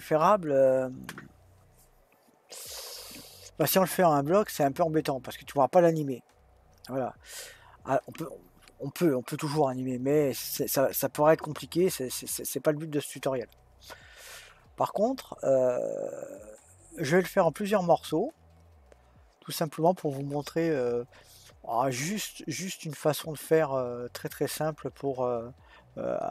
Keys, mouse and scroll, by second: 17.2-17.7 scroll down 1, 17.7-20.2 scroll up 2, 20.2-20.8 scroll up 1.